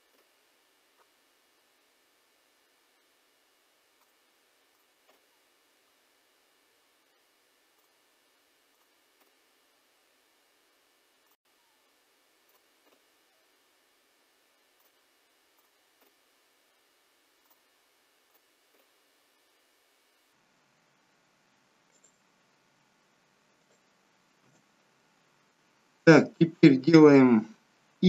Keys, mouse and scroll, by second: 3.8 k, 7.5 k, 10.1 k, 14.5 k, 17.1 k, 21.4 k, 24.9-25.5 scroll down 2, 27.9 i.